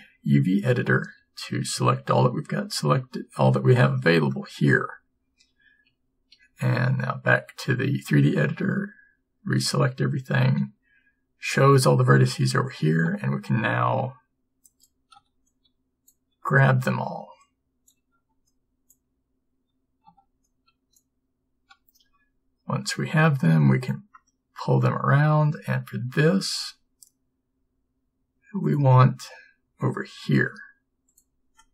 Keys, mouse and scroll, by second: 1.8 a, 6.0 a, 6.4 a, 22.1 b, 22.1 g, 26.3 g, 29.8 s.